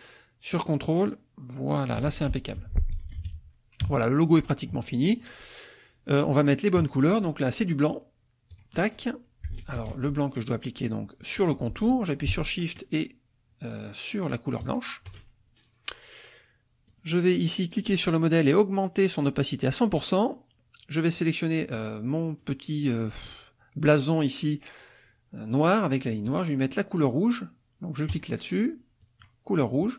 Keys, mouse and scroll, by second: 2.6 F1, 3.1 KP_Subtract, 5.1 shift+click, 8.5 click, 9.6 ctrl+z, 14.6 shift+click, 16.9 click, 19.2 click, 21.1 click, 28.1 click, 29.0 click.